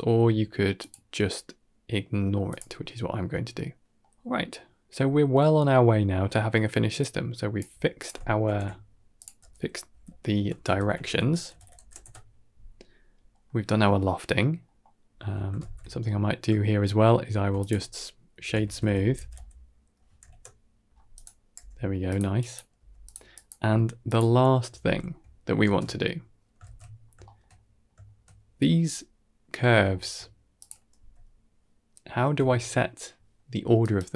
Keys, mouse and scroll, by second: 0.7-2.7 drag, 3.4-4.4 middle drag, 4.8 scroll down 2, 5.0 middle click, 5.6 middle click, 6.1 middle click, 6.8-7.4 drag, 7.5 g, 8.3 ctrl+j, 9.0 click, 9.2 F2, 10.2 shift+BackSpace, 10.5 shift+BackSpace, 13.2 middle click, 13.9 middle click, 14.5 middle click, 14.9-15.4 scroll up 1, 15.5 alt+shift+z, 15.7 scroll up 3, 16.5-16.8 shift+middle drag, 17.2 shift+a, 21.4 g, 22.2 click, 22.6 g, 23.2 click, 23.4 g, 24.7 ctrl+s, 25.5 ctrl+space, 26.1 scroll down 3, 26.5 alt+shift+z, 26.8 scroll down 2, 27.1 shift+middle click, 27.4 middle click, 27.9 shift+middle click, 28.7 middle click, 29.8 shift+middle click, 30.4 click, 30.8 g.